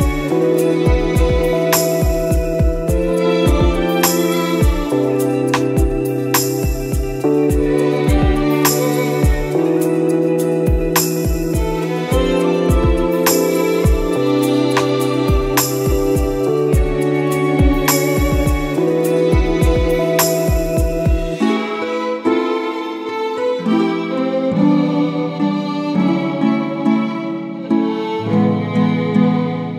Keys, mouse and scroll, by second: 0.8 click, 1.7 scroll down 1, 5.9 click, 16.0 scroll down 1, 16.3-17.1 scroll up 1, 17.1 scroll down 1, 19.3 click, 20.1 click, 24.1 ctrl+s, 24.7 click, 24.9 scroll up 1, 26.9 click, 28.9 click.